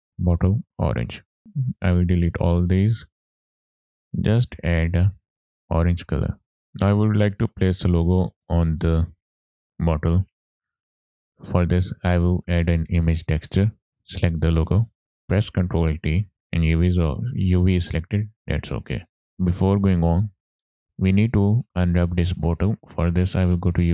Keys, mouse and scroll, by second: 1.4 middle click, 1.4-1.7 scroll down 2, 1.7-2.6 drag, 2.6 x, 3.4 x, 3.7 click, 3.9 middle click, 4.1-4.5 scroll up 2, 5.1 click, 6.7 click, 6.7 scroll down 2, 6.9-7.2 shift+middle drag, 7.6 click, 10.5 middle click, 11.1 scroll down 2, 11.3 middle click, 12.0 click, 12.2 shift+a, 15.0 click, 15.0 middle click, 16.1 ctrl+t, 16.4 middle click, 16.4 scroll up 5, 18.1 scroll down 2, 18.3 middle click, 18.9 scroll down 1, 19.2 middle click, 19.2 ctrl+right click, 19.2 middle click.